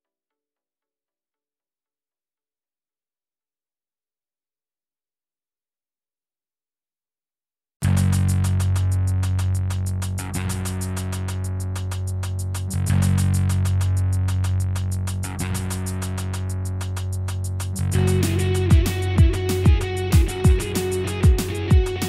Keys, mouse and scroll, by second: 2.4-2.9 scroll down 2, 2.9 shift+middle click, 3.2-4.0 scroll up 2, 4.2 shift+click, 5.2 click, 6.8 click, 7.5 shift+middle click, 8.5 click, 9.4 k, 12.7 k, 15.5 shift+click, 16.2 k, 17.3 shift+click.